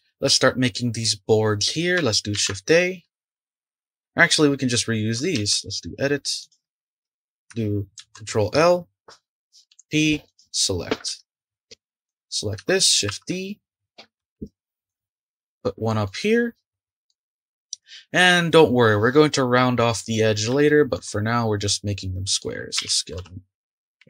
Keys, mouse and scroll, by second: 1.0-1.3 scroll down 3, 1.3 scroll up 1, 2.3 shift+a, 4.3 click, 5.3 Tab, 6.4 click, 7.9 ctrl+l, 9.7 p, 11.1 Tab, 12.0 click, 13.1 ctrl+d, 14.3 shift+d, 16.0-18.8 middle drag, 19.3-20.2 middle drag, 20.2-20.6 scroll up 2, 20.6-21.2 shift+middle drag, 21.2-21.8 scroll up 1, 21.8-22.8 middle drag, 22.8 s.